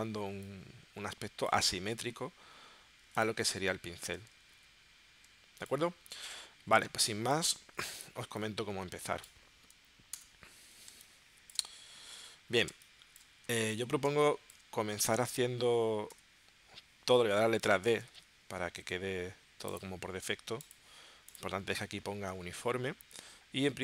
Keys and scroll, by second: 3.0 v, 4.5 super+z, 6.9 space, 7.8 v, 10.1 BackSpace, 10.9 space, 12.7 space, 14.0 space, 16.1 d.